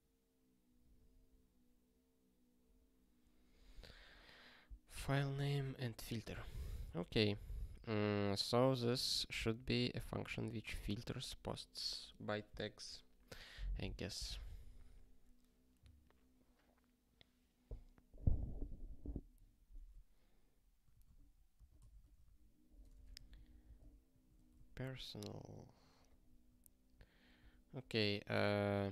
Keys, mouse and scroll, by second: 6.8 super+w, 8.6 click, 9.5 ctrl+p, 10.3 ctrl+b, 20.8 ctrl+n, 21.1 alt+b, 21.5 alt+b, 21.7-24.1 typing, 24.5 ctrl+s, 24.8 ctrl+p, 26.0 ctrl+p, 26.8 Return, 27.2 ctrl+p, 27.4 Return, 28.6 click.